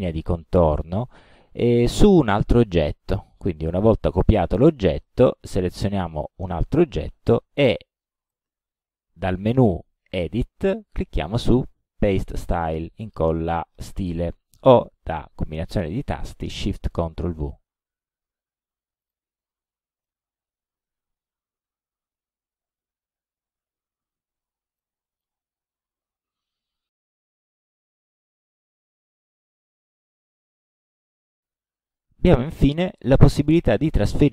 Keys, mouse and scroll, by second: 6.0 click, 17.5 click, 19.1 click, 19.6 middle click, 21.5-21.8 ctrl+scroll up 2, 22.1 ctrl+scroll down 2, 22.6 ctrl+scroll down 2, 23.2 ctrl+scroll up 2, 24.8 click, 27.5 click, 28.5-29.0 drag, 29.5-30.3 drag.